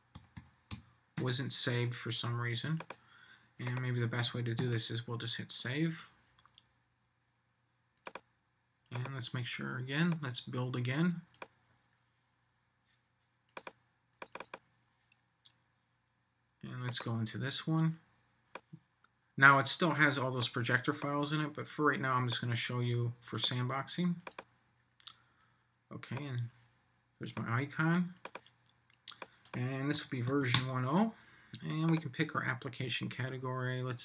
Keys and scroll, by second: 4.6 super+s.